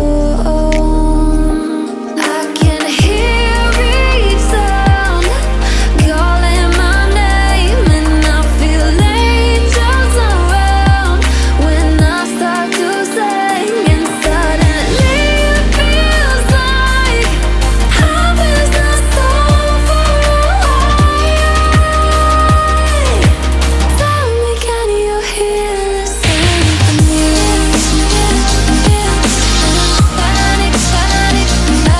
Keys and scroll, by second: 8.0 ctrl+z, 22.4 ctrl+z.